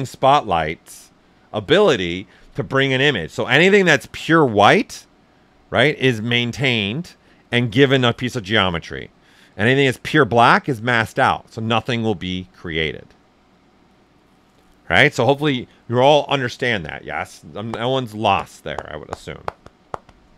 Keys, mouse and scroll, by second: 2.6 ,.